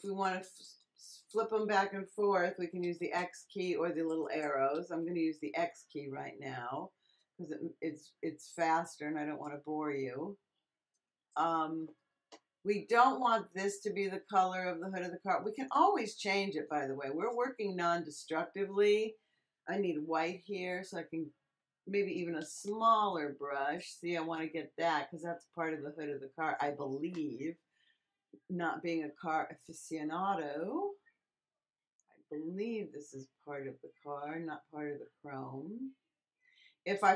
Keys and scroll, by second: 2.5 x, 4.7 x, 20.1 x, 22.3 [.